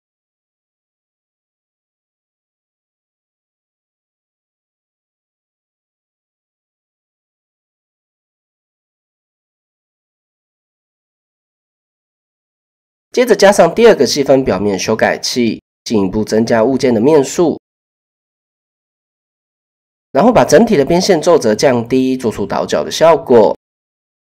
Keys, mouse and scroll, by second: 1.0 middle click, 3.6 click, 4.4 click, 5.9 KP_7, 6.2 Tab, 7.3 click, 7.7-8.0 shift+drag, 8.9 shift+middle click, 11.4-11.8 shift+middle drag, 17.2-17.9 drag, 19.8 Tab, 20.3 a, 21.0-22.8 drag, 23.4 Tab, 23.9-24.2 shift+drag.